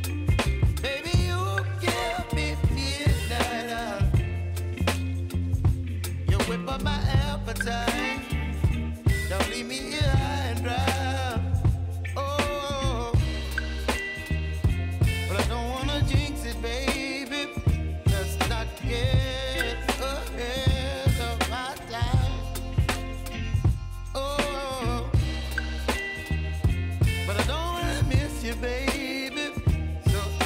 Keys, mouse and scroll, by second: 0.3 v, 3.8 click, 5.0-6.2 typing, 7.4-14.4 drag, 14.4 click, 17.8 space, 20.6-30.4 drag.